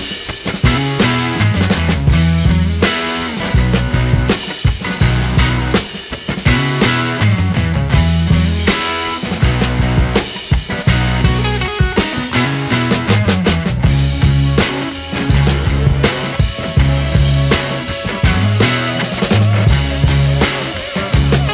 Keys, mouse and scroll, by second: 2.5 click, 7.8 click, 9.2-9.6 scroll up 6, 10.1-10.9 scroll down 3, 10.9-11.2 scroll down 2, 13.4 click, 14.1-18.2 drag, 18.2-19.7 scroll down 8, 19.7 click.